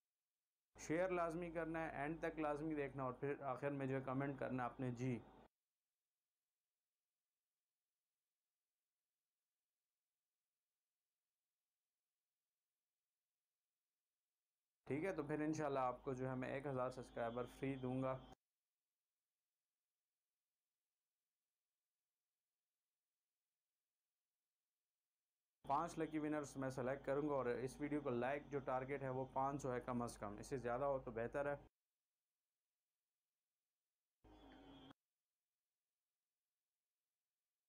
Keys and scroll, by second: 0.7 shift+Delete, 1.1 space, 5.8 space, 6.9 c, 12.6 v, 14.7 shift+Delete, 15.2 space, 18.7 space, 19.4 c, 23.2 v, 25.5 shift+Delete, 26.0 space, 32.0 space, 34.6 space, 36.3 c.